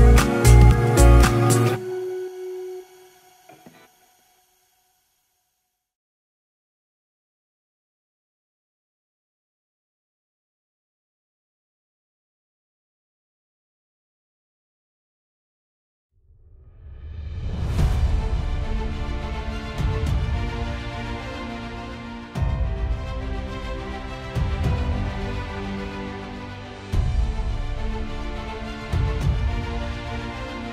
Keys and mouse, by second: 2.0 ctrl+z, 5.5 ctrl+z, 15.0 space, 19.1 middle click.